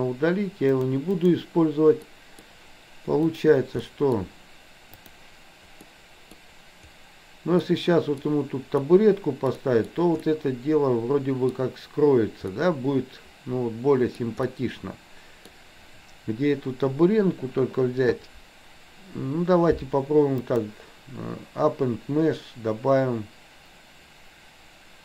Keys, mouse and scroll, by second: 0.7 click, 2.1 middle click, 3.9 middle click, 4.9 click, 5.9 middle click, 7.7-8.2 middle drag, 8.7-9.5 middle drag, 9.6 middle drag, 10.2-11.6 middle drag, 12.5-14.1 middle drag, 14.4-15.5 middle drag, 20.4-25.0 drag.